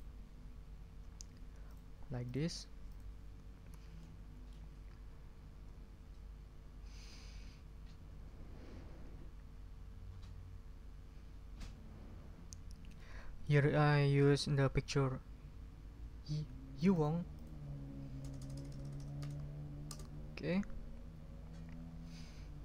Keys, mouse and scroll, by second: 1.7 click, 2.2 drag, 2.9 click, 4.0 middle click, 4.2 click, 12.9 click, 16.7 click, 17.3 click, 18.2 BackSpace, 19.9 Return.